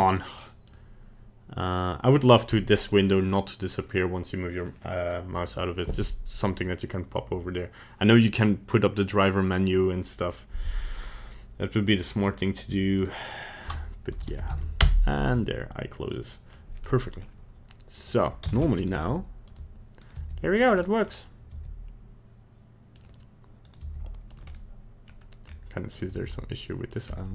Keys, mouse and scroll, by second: 0.1 right click, 16.9 middle click, 18.0 right click, 18.6 ctrl+Tab, 18.6 right click, 18.9 g, 20.0 right click, 20.2 g, 20.8 middle click, 21.0 middle click, 21.1-21.5 scroll down 2, 21.5 g, 23.6 right click, 23.8 g, 24.5 middle click, 25.5-25.8 scroll up 2, 25.9 right click, 26.1 g, 27.1 middle click.